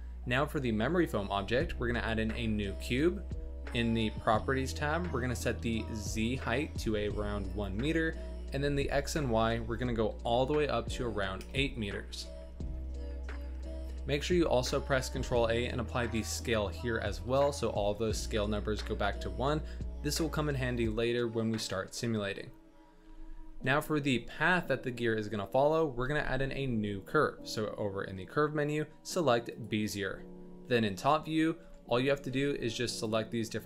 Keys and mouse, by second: 1.4 shift+a, 4.0 n, 6.3-7.4 drag, 9.0-11.4 drag, 12.9-13.5 middle drag, 14.2 ctrl+a, 23.0 n, 23.7 middle click, 26.2 shift+a, 30.9 KP_7, 31.5 Tab, 32.2 z, 33.0 click.